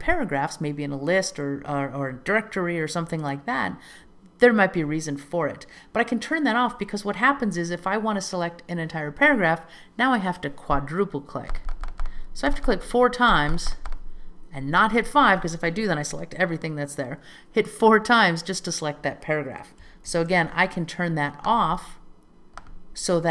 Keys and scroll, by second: 20.2 super+k.